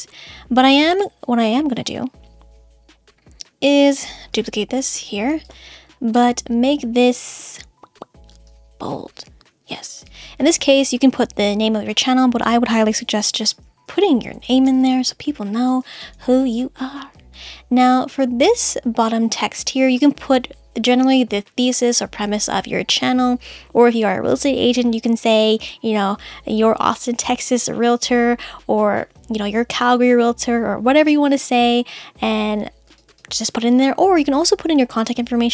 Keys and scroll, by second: 13.1 shift+l, 14.6 space, 14.9 shift+n.